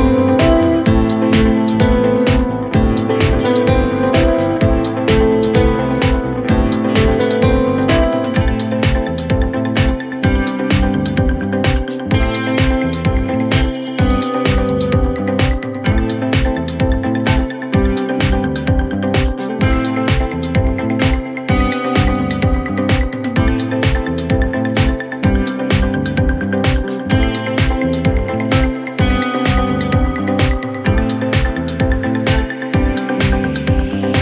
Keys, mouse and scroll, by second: 1.6 click, 1.7-2.6 typing, 7.1 click, 8.4 click, 9.4 click, 9.4-10.3 typing, 11.8 click, 15.0 click, 15.6 scroll, 15.7-16.7 scroll up 3, 17.5 click, 17.9-18.3 scroll down 2, 18.7 scroll down 1, 20.1 click, 20.4-21.0 scroll, 21.0 scroll down 2, 23.1 click, 24.4 click, 24.5-25.7 typing, 27.0 click, 27.1-27.8 typing, 29.1 click, 32.3 click, 33.8 click.